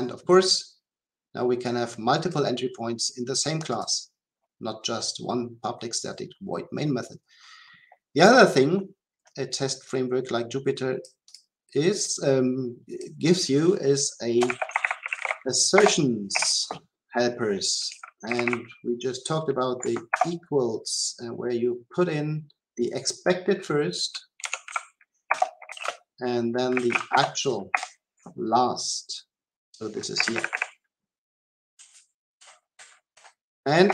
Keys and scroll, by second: 15.8 Return, 20.1 Return, 25.3 Return, 33.1 Delete.